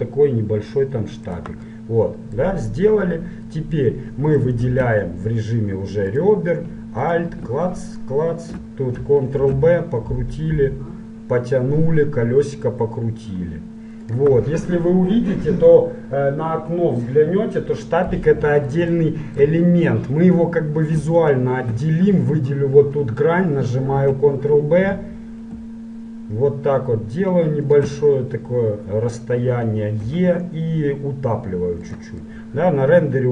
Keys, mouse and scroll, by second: 1.9-3.3 middle drag, 4.1 middle click, 4.8 ctrl+Tab, 7.1-9.8 right drag, 9.6 ctrl+b, 18.3-21.3 middle drag, 21.3-23.3 right drag, 24.1 ctrl+b, 28.3 middle click, 30.1 e, 32.4-33.3 middle drag.